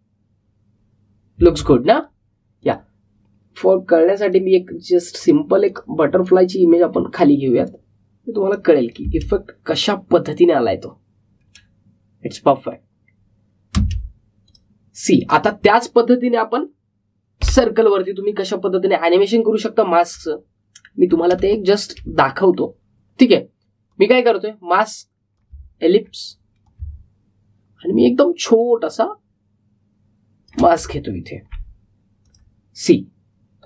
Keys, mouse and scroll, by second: 2.3 space, 2.9-10.0 drag, 10.0 space, 14.7 space, 15.4 click, 21.0 click, 21.3-22.0 alt+scroll up 1, 22.3 space, 22.5 click, 22.8 space, 23.1-26.7 drag, 26.7-27.0 alt+scroll down 1, 27.6-32.0 drag, 32.0-32.5 alt+scroll up 1, 33.2 click.